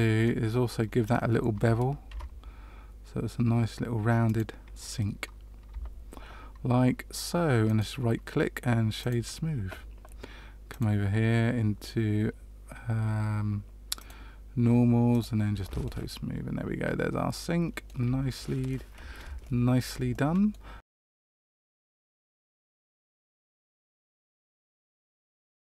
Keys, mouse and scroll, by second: 0.2 middle click, 2.0 ctrl+b, 5.6 Tab, 7.6 right click, 13.1 click, 13.9 click, 15.1 click, 15.8 middle click, 18.3 shift+middle click, 19.4 shift+middle click, 20.0 middle click.